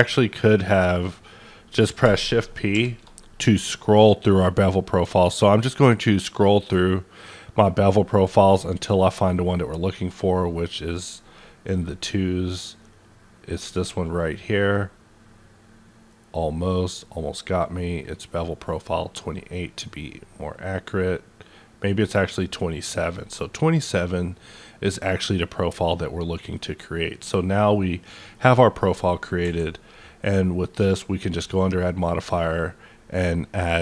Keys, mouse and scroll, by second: 0.4 click, 2.7 shift+p, 5.8 scroll up 1, 6.3-6.9 scroll down 1, 6.9-7.6 scroll down 1, 7.6-8.1 scroll down 2, 8.1-10.0 scroll up 11, 10.2-10.8 scroll up 1, 10.8-11.7 scroll up 2, 11.7 scroll up 2, 12.4-12.7 scroll up 1, 12.7-13.9 scroll down 1, 16.6 scroll down 1, 17.2-18.9 scroll up 5, 18.9-19.5 scroll up 2, 19.9 scroll down 8, 20.5-21.0 scroll up 1, 21.0-22.1 scroll down 1, 28.0 click, 28.0-28.5 scroll down 1, 28.5 middle click, 29.0 scroll up 1, 29.4 q.